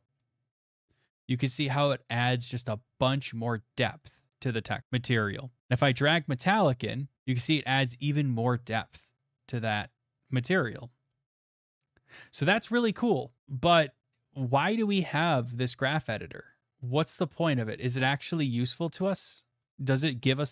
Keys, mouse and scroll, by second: 0.2 click, 6.8 click, 12.4 middle click, 12.5 middle click, 13.1 middle click, 13.6-14.3 scroll, 14.3 click, 15.5-15.8 scroll, 18.1 click, 18.7 click, 19.6 click.